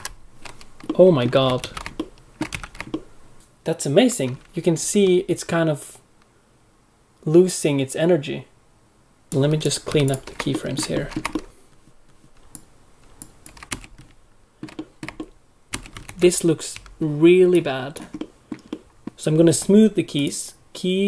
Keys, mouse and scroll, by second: 0.0 shift+F6, 0.0 middle click, 0.8 middle click, 1.6 alt+a, 1.9 ctrl+middle click, 2.5 a, 2.9 ctrl+middle click, 3.3 middle click, 9.3 alt+a, 9.3 ctrl+middle click, 9.3 click, 9.8 x, 10.5 ctrl+middle click, 10.9 middle click, 11.3 ctrl+middle click, 12.4 ctrl+middle click, 12.4 click, 13.4 x, 14.0 ctrl+middle click, 14.7 middle click, 15.1 ctrl+middle click.